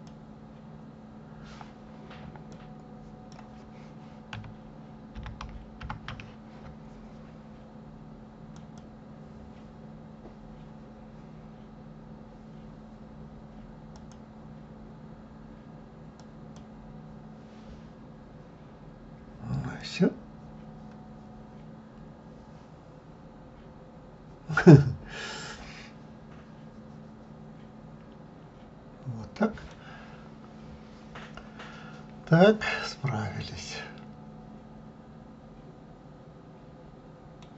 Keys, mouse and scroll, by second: 0.2 click, 8.7 click, 14.1-18.1 drag, 18.1-19.2 scroll down 1, 19.2 scroll up 1, 20.0-23.0 middle drag, 30.1-30.6 scroll down 2, 30.6-32.4 scroll up 5, 32.4-32.7 scroll up 1, 32.7-35.6 middle drag.